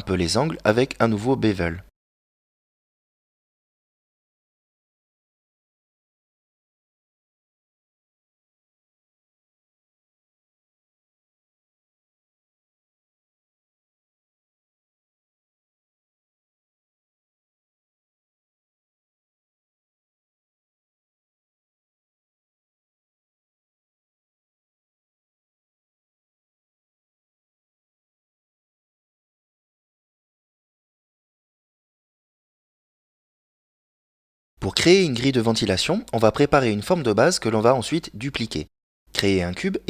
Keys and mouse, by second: 0.1 a, 1.3 right click, 3.5 shift+right click, 5.3 shift+right click, 6.2 middle click, 8.0 shift+right click, 8.7 middle click, 10.2-11.9 shift+right drag, 12.9 KP_Decimal, 13.8 middle click, 16.1 ctrl+b, 27.0 click, 29.2 click, 31.6 click, 33.7 click, 37.8 click, 39.0 shift+a.